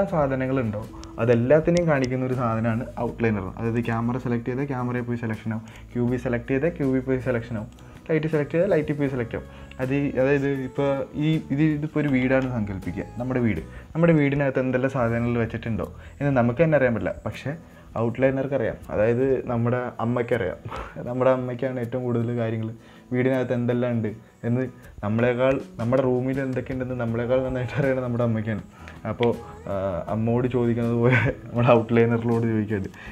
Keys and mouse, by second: 4.1 click, 6.0 click.